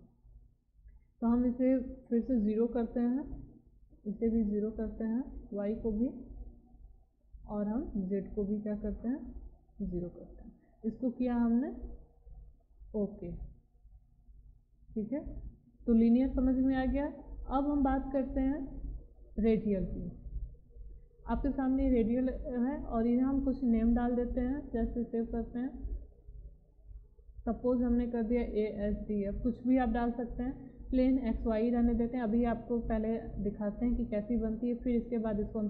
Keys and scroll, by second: 3.2 0, 4.5 0, 6.0 BackSpace, 7.1 0, 9.7 0, 28.1-29.7 typing.